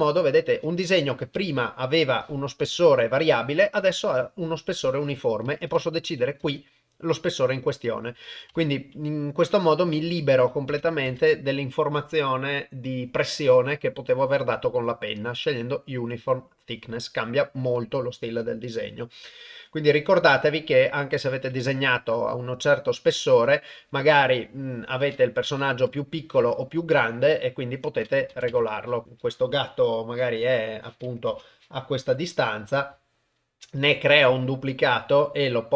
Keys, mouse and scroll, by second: 1.4-2.5 ctrl+middle drag, 5.5 click, 8.1 click, 10.0-11.1 drag, 22.7 click, 25.1 click, 28.1 click, 30.1 middle click, 31.3 KP_0, 32.1 g, 33.8 shift+d, 35.5 middle click, 35.5 click.